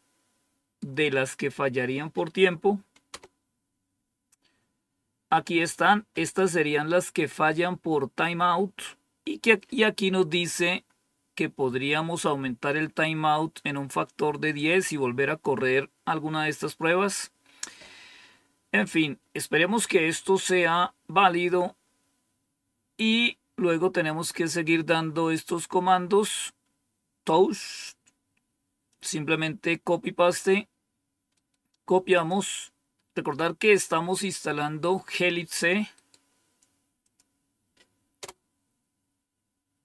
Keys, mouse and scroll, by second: 3.0 Return, 17.3-18.1 scroll down 1, 18.1-21.3 scroll down 1, 21.3-28.8 scroll down 1, 28.8-30.3 drag, 32.1 click, 37.0 click, 38.2 Return.